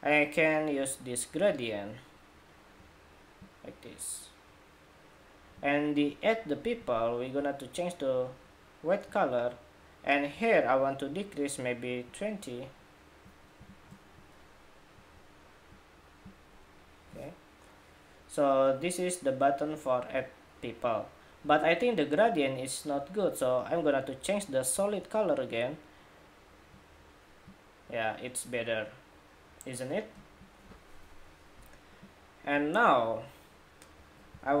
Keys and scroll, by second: 34.2 super+=.